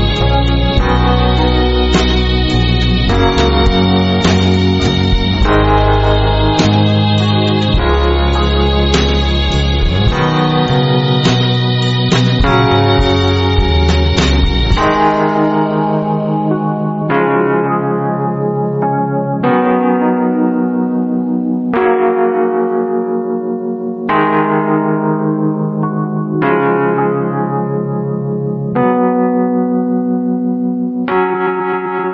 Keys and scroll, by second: 3.9 a, 9.6 space, 10.1 alt+super+space, 10.2 alt+super+space, 10.4-11.0 alt+super+space, 11.6-13.0 typing, 14.3 o, 16.8 v, 17.5-18.2 space, 27.9-28.8 typing, 29.9 space.